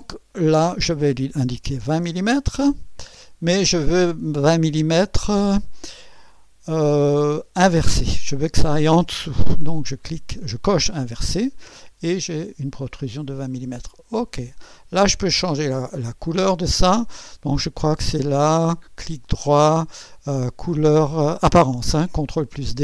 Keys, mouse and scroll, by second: 1.6-2.5 typing, 10.5 click, 12.4 click, 14.2 click, 15.2 scroll down 2, 15.9 right click, 18.7 right click, 22.2 click.